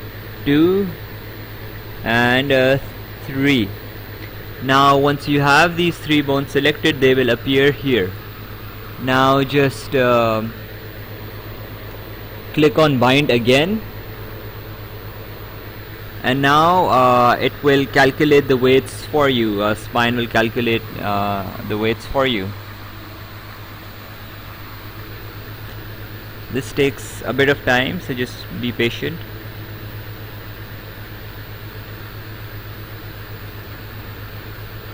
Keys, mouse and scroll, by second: 0.1 click, 2.4 click, 15.3 click.